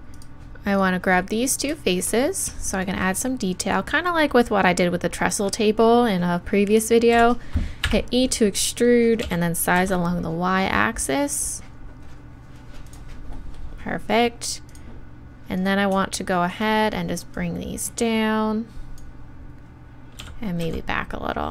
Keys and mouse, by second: 1.2-2.7 drag, 1.2-2.7 right drag, 9.2 s, 12.9-15.3 right drag, 14.5-16.6 drag, 15.6-19.0 right drag, 17.3-20.2 drag, 20.2 s.